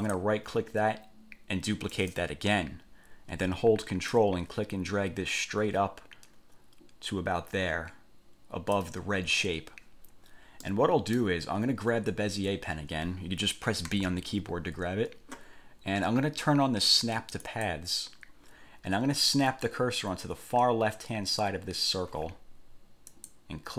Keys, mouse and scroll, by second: 0.2 click, 2.1 click, 4.3-9.1 ctrl+drag, 10.8 middle click, 14.0 b, 17.6 click, 23.2 click.